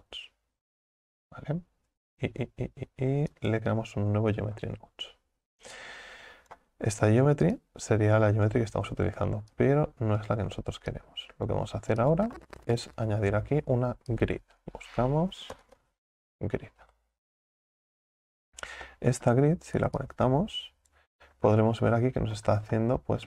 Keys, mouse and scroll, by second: 5.9-10.3 drag, 21.0 click, 21.9-22.7 scroll up 4, 22.7-23.2 middle drag.